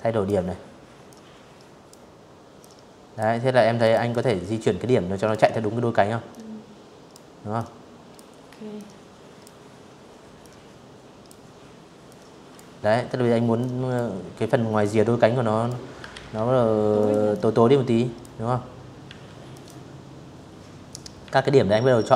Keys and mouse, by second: 0.3 click, 1.5 click, 1.8-2.9 drag, 4.0 click, 5.2 click, 6.4 click, 8.0 click, 9.7 click, 11.2 click, 12.5 click, 13.8 ctrl+z, 14.7 click, 15.0 click, 16.7 a, 17.2 click, 18.9 a, 19.9 click, 21.3 click.